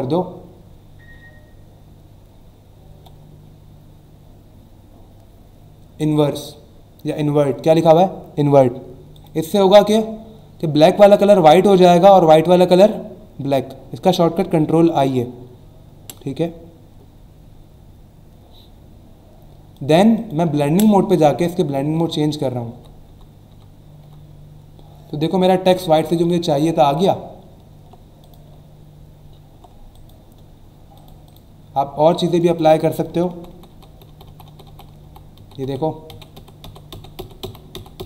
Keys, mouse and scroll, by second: 9.1 click, 19.7 click, 20.1 click, 27.4-27.8 alt+scroll down 1, 28.2 click, 28.5 alt+scroll down 1, 29.9 click, 30.9 click, 32.1 click, 32.5 click.